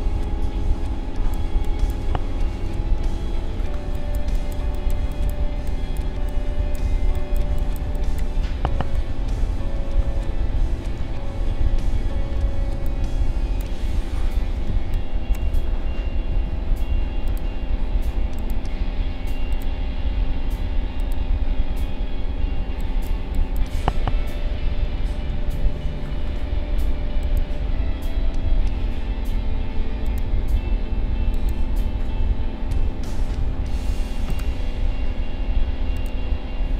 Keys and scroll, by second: 2.7 ctrl+=, 3.5 space, 12.6 space, 14.7 space, 16.3 a, 22.6 space, 24.5 ctrl+-.